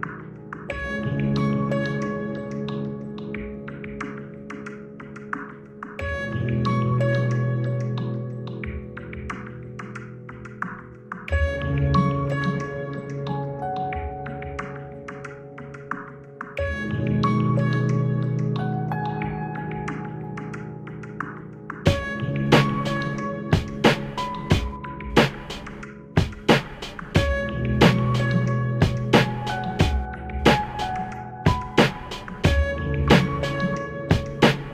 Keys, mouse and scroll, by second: 0.2-2.4 shift+middle drag, 2.7-3.5 scroll up 2, 5.0 b, 6.1-8.6 drag, 11.3 a, 11.7 b, 12.9-15.4 drag, 16.8-19.6 shift+middle drag, 20.7-21.6 shift+scroll up 4, 22.0-28.2 shift+right drag, 31.2 e, 33.3 click.